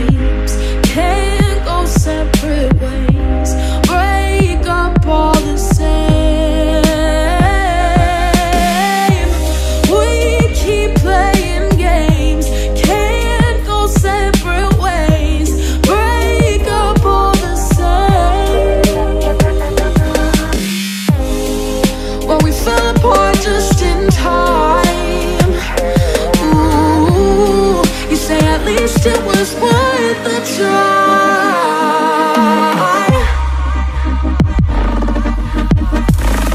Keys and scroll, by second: 1.9 ctrl+=, 4.7 p, 7.3 p, 13.8 ctrl+-, 16.3 ctrl+c, 16.4 ctrl+v, 23.8 ctrl+=, 25.0 ctrl+-, 30.1 ctrl+-, 32.7 Delete, 34.7 Delete, 35.3 ctrl+0.